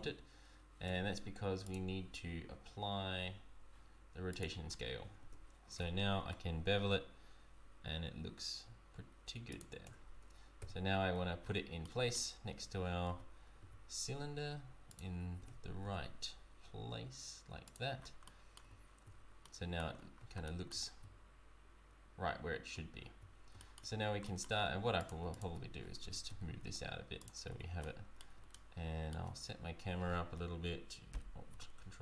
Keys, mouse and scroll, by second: 0.8 Tab, 1.6 click, 4.6-5.0 scroll down 2, 5.2 Tab, 5.2-5.7 scroll down 1, 6.2 ctrl+b, 9.8 Tab, 10.6 KP_1, 11.1 scroll up 2, 11.7-12.1 scroll up 8, 11.8 shift+middle click, 12.5 g, 18.0 scroll down 4, 18.2 middle click, 19.4 middle click, 19.4 z, 19.9-20.4 scroll down 3, 20.4 middle click, 23.6 shift+middle click, 24.0 scroll down 2, 24.2 middle click, 24.5 Tab, 25.0 click, 25.3 shift+click, 26.0 g, 27.5 Tab, 27.8 middle click, 28.4-28.8 shift+scroll up 2, 28.5 shift+middle click, 29.3-30.0 scroll up 2, 31.1 ctrl+alt+KP_0.